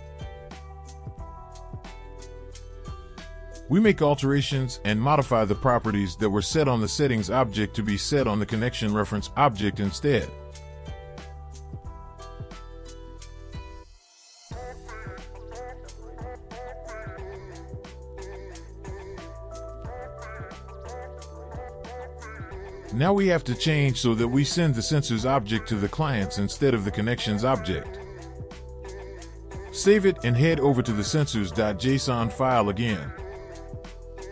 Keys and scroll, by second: 1.8 BackSpace, 2.2 BackSpace, 3.1 ctrl+f, 5.0-7.7 typing, 10.8-13.1 typing, 21.7 ctrl+b, 26.5-29.0 typing, 30.2 Return, 31.8 ctrl+s.